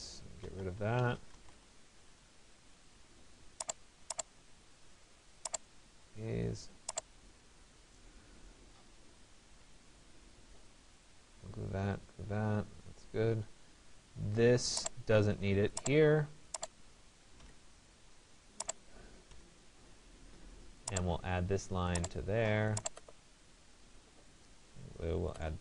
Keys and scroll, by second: 1.1 Return, 17.0 Delete.